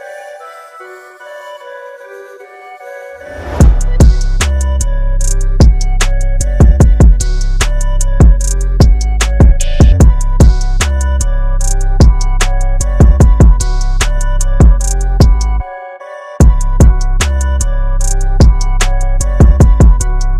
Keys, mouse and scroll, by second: 8.4-9.7 scroll down 1, 9.7-11.1 scroll up 1, 11.6 click, 12.2 KP_0, 13.6 click, 16.1-17.1 scroll up 1, 19.9-20.3 scroll up 1.